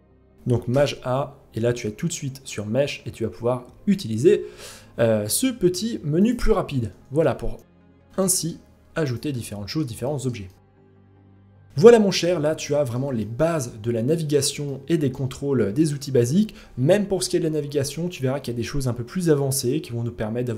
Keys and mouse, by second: 6.6 g, 7.7 middle drag, 8.3 g, 8.9-9.3 middle drag, 9.6 shift+middle drag, 10.0 middle drag, 10.6 middle click, 11.1 middle click, 11.5-11.8 middle drag, 12.2 shift+middle drag, 12.7-13.1 middle drag, 13.6 shift+middle drag, 14.2-14.6 middle drag.